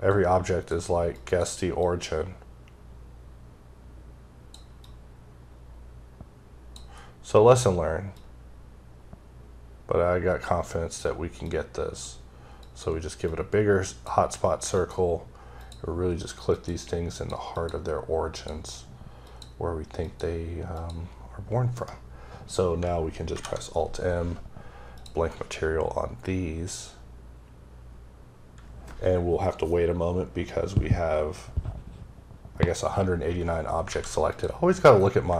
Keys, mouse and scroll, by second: 0.1 click, 1.2 click, 1.8 click, 4.8 click, 6.9 scroll up 1, 7.2-7.8 scroll down 1, 7.8-8.2 scroll down 3, 8.2 click, 11.5 click, 12.6 click, 13.3 click, 15.6 click, 16.6 click, 17.2 click, 17.6 click, 18.4 click, 19.3 click, 20.1 click, 20.8 click, 21.8 right click, 23.3 m, 25.0 click, 33.3 scroll up 2, 33.8 scroll down 1, 33.9 a, 34.3 click.